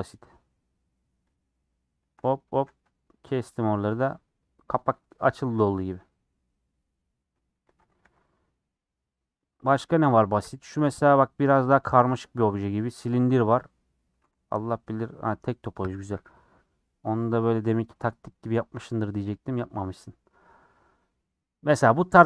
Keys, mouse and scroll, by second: 1.3 shift+click, 2.1 shift+click, 2.5 a, 3.5 u, 3.9-4.2 scroll down 7, 5.5 middle click, 6.0 click, 6.7-7.2 scroll down 7, 7.2 middle click, 7.8 Tab, 8.0 h, 9.4 click, 10.4 /, 10.8-12.3 middle drag, 12.3 scroll up 1, 12.8 scroll down 2, 13.5 middle click, 14.1 Tab, 14.3 a, 14.6 scroll up 4, 15.2-16.0 scroll down 5, 16.0-21.7 middle drag, 22.1-22.2 middle drag.